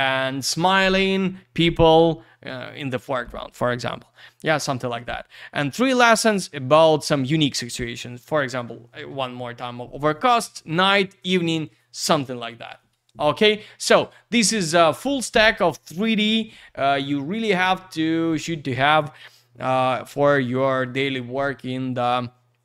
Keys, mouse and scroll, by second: 5.3 Page_Down, 13.6 Page_Down, 14.5 Page_Up.